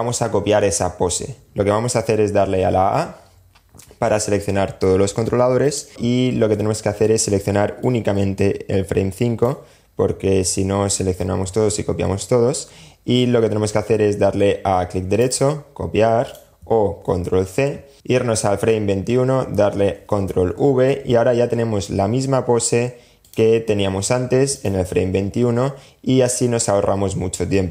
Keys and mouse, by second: 2.0 a, 4.8 click, 7.0-8.6 drag, 14.3 right click, 15.5 click, 16.5 super+c, 19.1 super+v, 22.4 click, 23.7 click, 27.3 click.